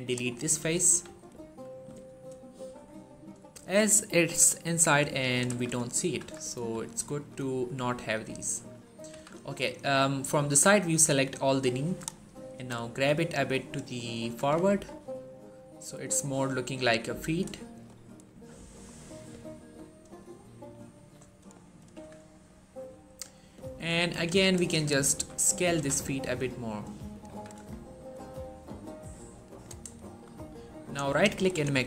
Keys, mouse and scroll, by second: 0.2 scroll down 1, 0.3 middle click, 0.7 1, 1.1-1.4 scroll down 1, 1.5 shift+middle click, 2.1-3.0 scroll down 1, 3.0-4.8 scroll up 1, 5.0 shift+middle click, 5.3 z, 6.0 shift+z, 6.4 3, 6.8 scroll down 1, 7.0 shift+middle click, 7.2-7.9 shift+scroll up 2, 8.9 z, 10.7-11.6 drag, 12.4 g, 13.8 click, 14.0-14.5 typing, 14.8 scroll down 1, 15.0-16.6 middle drag, 16.6 1, 17.5 shift+middle click, 18.7-19.2 scroll up 1, 19.3 shift+middle click, 20.3 shift+middle click, 21.5 shift+middle click, 21.8 z, 22.4-24.0 scroll up 1, 24.0 click, 25.0 s, 25.4 click, 25.6 g, 25.9 x, 26.9 click, 27.2 z, 27.4 Tab, 27.7-28.2 scroll down 1, 29.4 click, 29.8 shift+middle click, 30.2-30.7 scroll up 1, 30.7 click, 31.0 right click, 31.3 click.